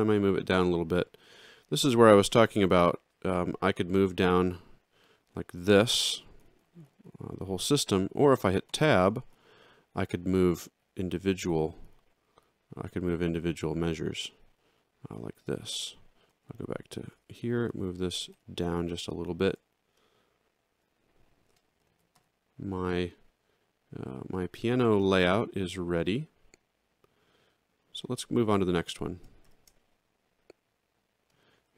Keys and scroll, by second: 6.2 ctrl+alt+Down, 8.7 Tab, 9.3 Down, 10.4 alt+Down, 11.4 Up, 14.7 alt+Up, 17.2 alt+Down, 18.3 ctrl+alt+Down, 21.9 alt+x, 29.4 alt+shift+], 31.6 alt+x.